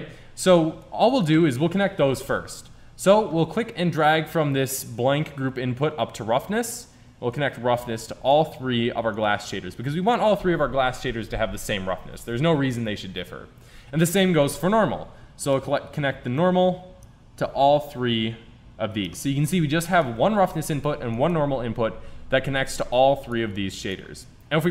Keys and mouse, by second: 2.8-5.4 drag, 7.5 click, 14.6-17.1 drag.